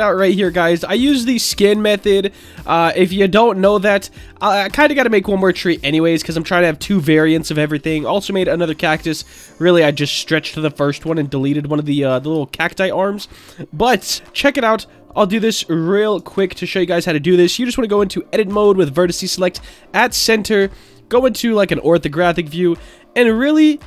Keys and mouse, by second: 0.5 click, 1.8-2.2 shift+middle drag, 3.2 shift+middle drag, 3.7-4.2 middle drag, 4.7 shift+middle drag, 7.3 shift+middle click, 7.9 middle click, 11.3-11.6 shift+middle drag, 11.9-12.2 middle drag, 12.6 shift+middle drag, 14.1 shift+a, 16.1 Tab, 18.5 m, 20.1 middle click, 20.3 middle click, 21.5 shift+middle click, 23.7 ctrl+right click.